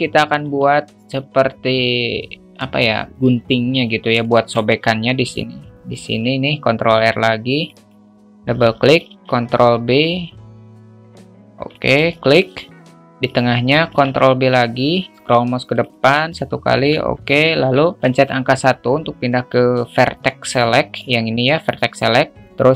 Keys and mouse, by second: 0.4 Tab, 4.2-4.5 alt+shift+middle drag, 6.0 ctrl+r, 9.2 ctrl+b, 12.1 alt+shift+middle click, 13.8 ctrl+r, 16.3 alt+shift+middle click, 18.1 1.